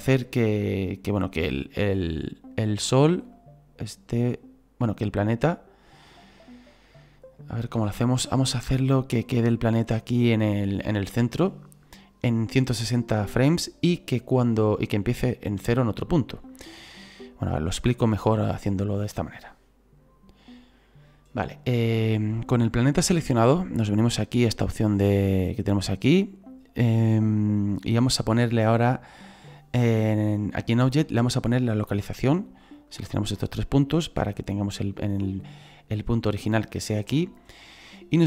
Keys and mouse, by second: 3.3 click, 13.6 click, 25.0 click, 32.9 click.